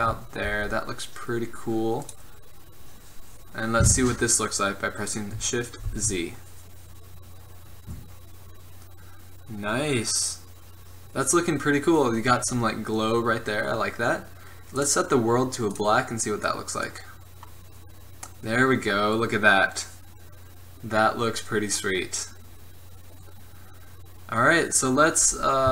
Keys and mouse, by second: 0.5 g, 3.6-4.1 drag, 6.0 shift+z, 14.9-17.8 drag.